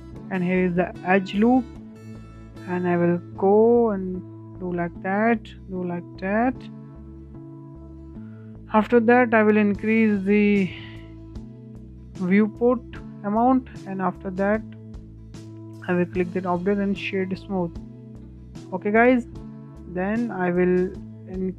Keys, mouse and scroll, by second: 0.1-7.0 drag, 8.4-10.3 drag, 10.3-10.7 scroll up 1, 10.7-11.1 shift+middle drag, 11.1-11.5 scroll down 1, 11.5 scroll up 2, 11.9-12.5 shift+middle drag, 12.5-13.5 right drag, 13.5 click, 13.9 Tab, 14.3-16.6 right drag, 16.6-16.9 scroll down 5, 16.9-17.3 middle drag, 17.3 scroll up 2, 17.5 shift+middle click, 17.9-18.2 scroll up 3, 18.2-18.9 shift+middle drag, 18.9 click, 19.7 click.